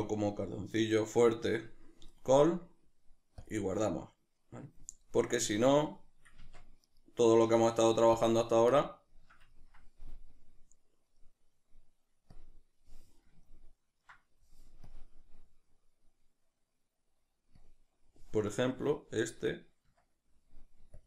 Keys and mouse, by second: 6.5 Tab, 6.8-8.2 right drag, 8.2 Tab, 8.7-12.4 shift+middle drag, 12.4 click, 18.5-21.0 middle drag.